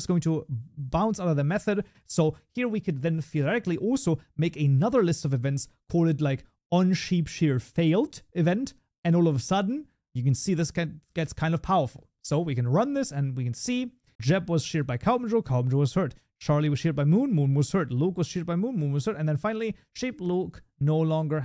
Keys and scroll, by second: 15.8 shift+F10.